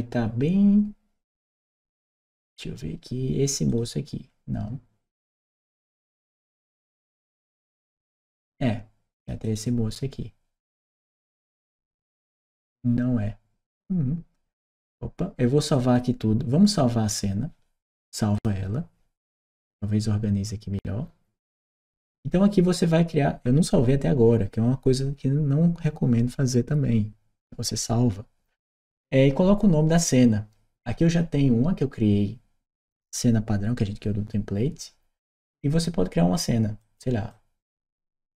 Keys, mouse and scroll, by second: 3.5 click, 9.0 click, 9.3 click, 11.2-11.5 drag, 11.8-13.5 scroll down 1, 13.5 click, 15.5 click, 18.1 click, 19.3 click, 36.6 click, 37.1 click.